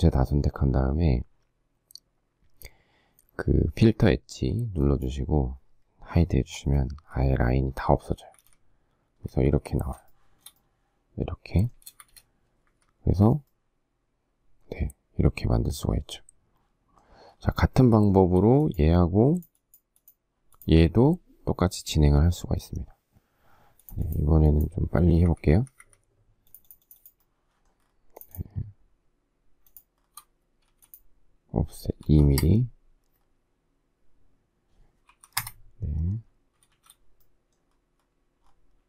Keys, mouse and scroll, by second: 6.3 h, 8.1 space, 8.4 Escape, 9.6 Escape, 10.1 shift+middle click, 11.9 space, 12.0 Escape, 12.7 Escape, 18.0 shift+middle click, 25.3 Escape, 25.6 Escape, 29.7 shift+click, 30.0 shift+scroll, 30.7 f, 32.1 2, 35.1 2, 35.4 Return, 36.7 shift+z.